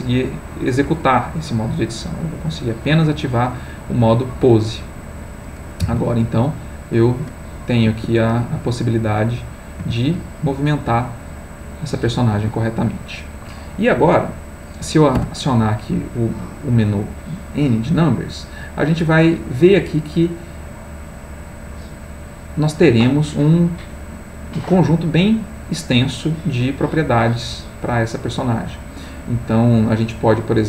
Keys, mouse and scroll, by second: 1.9 click, 2.7 click, 4.8 click, 5.8 r, 7.9 Escape, 8.9 click, 9.8 g, 12.3 Escape, 15.2 n, 20.1 click, 21.4-22.8 drag, 25.0-26.0 middle drag, 26.6 middle click, 27.8 middle click, 29.1 middle click.